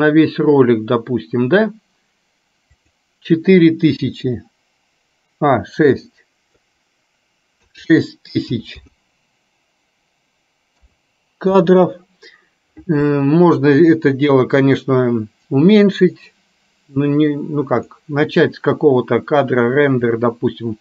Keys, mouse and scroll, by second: 2.8-11.7 drag, 8.7 KP_0, 18.1 click, 20.3-20.8 drag.